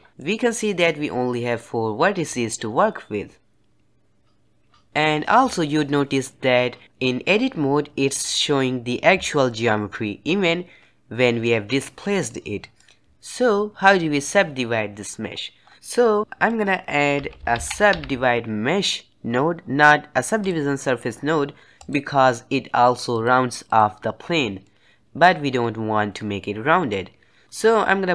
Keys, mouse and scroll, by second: 0.0-3.1 middle drag, 9.9-13.1 middle drag, 13.1 Tab, 15.5 scroll down 2, 16.2 shift+a, 23.1-24.6 drag, 24.6-27.4 middle drag, 27.4 click.